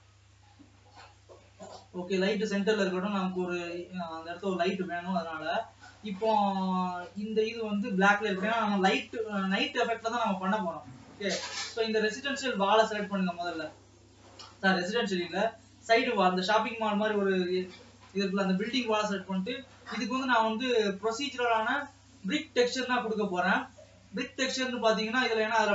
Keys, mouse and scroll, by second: 0.0 KP_0, 3.3-7.2 middle drag, 7.2-8.8 drag, 8.8 KP_0, 10.0 scroll up 1, 10.6 ctrl+s, 11.7-13.0 drag, 13.0 Tab, 13.7 alt+a, 14.4-22.1 drag, 22.1 scroll down 2, 22.5 Tab, 22.9 scroll up 1, 23.7 ctrl+s.